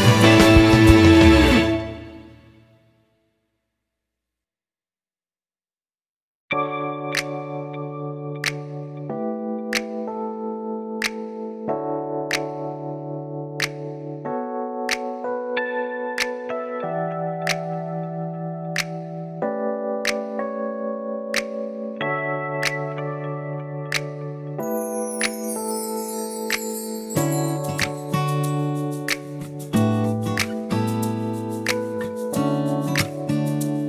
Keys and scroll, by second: 2.0-5.7 typing, 11.5-15.3 typing.